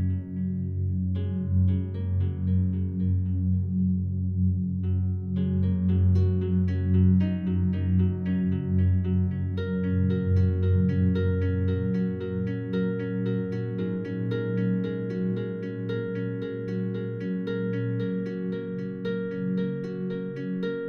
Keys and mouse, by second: 0.2-1.1 drag, 1.9-3.2 drag, 5.3 click, 6.5-7.3 drag, 7.6-9.2 alt+drag, 9.4-9.8 ctrl+alt+drag, 10.6 shift+click, 11.4 alt+click, 13.6-16.5 drag, 17.6 alt+click, 18.4 click.